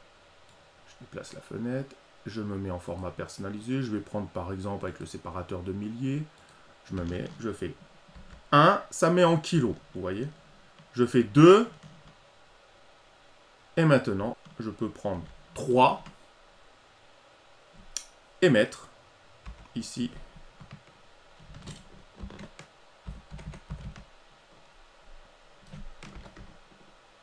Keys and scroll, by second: 8.1 ctrl+v, 11.1 ctrl+v, 15.1 ctrl+v.